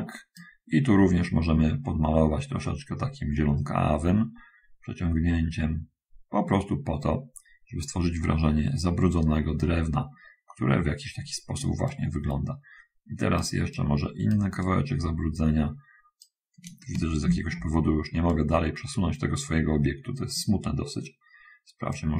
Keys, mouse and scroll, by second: 2.2-5.7 drag, 5.9 click, 6.7-8.2 drag, 8.5 click, 12.0-13.5 right drag, 13.7-14.7 right drag, 14.9-16.5 right drag, 18.5-20.8 right drag.